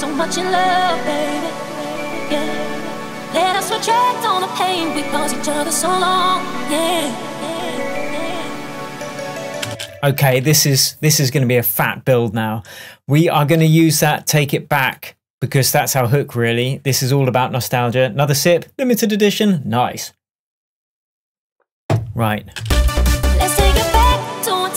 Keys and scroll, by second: 9.7 space, 22.7 space.